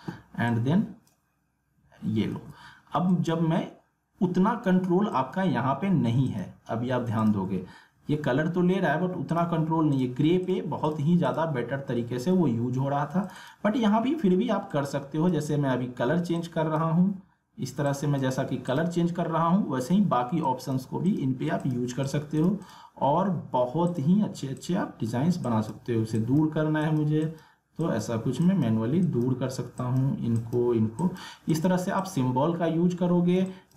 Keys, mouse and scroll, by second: 2.3 ctrl+z, 3.1 click, 3.9 alt+scroll up 1, 4.3 alt+scroll down 1, 5.1 click, 7.6-8.0 scroll up 1, 9.3 click, 12.0 alt+scroll down 1, 13.2-30.0 drag, 32.0 click, 32.6 alt+scroll down 1, 33.4 alt+scroll up 1, 33.4 space, 33.5 click.